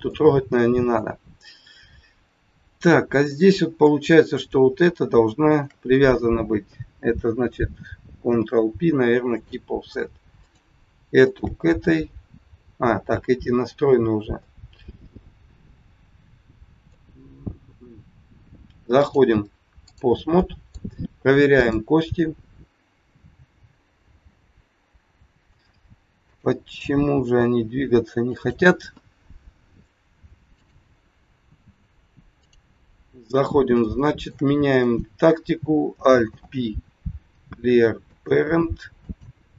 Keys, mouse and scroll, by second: 0.1 middle click, 1.1-1.5 scroll up 2, 2.9 scroll up 1, 3.2 middle click, 4.2 click, 5.5 shift+click, 8.1 ctrl+p, 10.3 click, 11.2 shift+click, 14.0 scroll down 2, 14.4 middle click, 19.0 click, 20.4 middle click, 21.5 click, 21.9-23.1 scroll up 1, 23.1 g, 26.3 click, 27.1 g, 30.5 click, 32.9-33.5 scroll up 2, 33.9 shift+middle click, 34.8 click, 36.2 alt+p, 39.0 click.